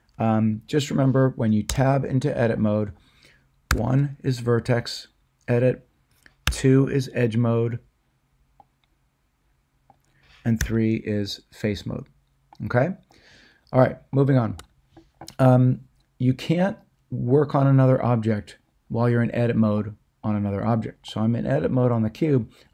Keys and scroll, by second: 1.7 Tab, 3.7 1, 6.4 2, 10.6 3.